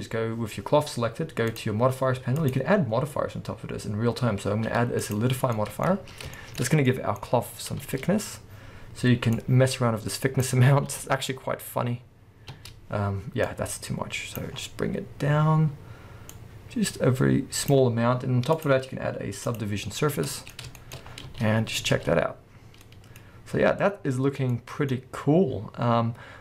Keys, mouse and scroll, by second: 1.5 click, 2.4-5.6 drag, 5.6-7.4 middle drag, 5.9 scroll up 2, 6.6 scroll up 2, 7.4 scroll down 1, 7.8 space, 8.0-9.4 scroll up 1, 9.4-20.3 drag, 10.6 scroll down 1, 10.9 space, 11.4 scroll down 1, 12.6 space, 14.6-14.9 scroll up 1, 19.9-20.3 scroll down 1, 20.3-21.3 middle drag, 21.1 scroll down 1, 21.3 space, 21.4-26.4 middle drag.